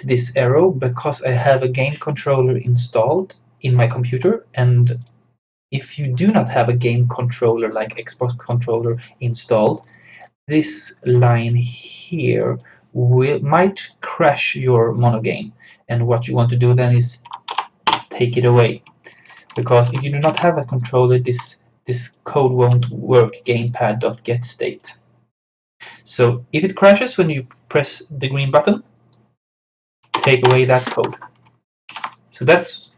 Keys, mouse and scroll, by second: 5.1 click, 9.6 scroll down 1, 11.9-15.2 drag, 15.0 typing, 17.5 BackSpace, 18.9 F6, 19.9 ctrl+z, 21.5-27.3 drag, 29.2 click, 30.2 BackSpace, 31.9 ctrl+s.